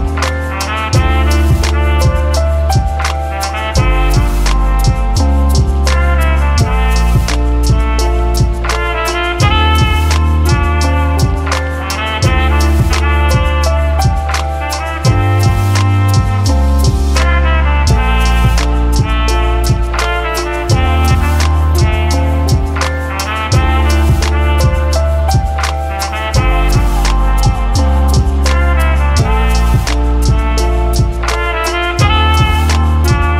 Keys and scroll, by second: 1.5 ctrl+d, 2.4 ctrl+d, 3.9 ctrl+d, 8.9-9.8 typing, 10.3 ctrl+d, 18.0-18.9 typing, 25.8 ctrl+d, 28.6 ctrl+z, 29.0 ctrl+z, 30.9-31.7 typing.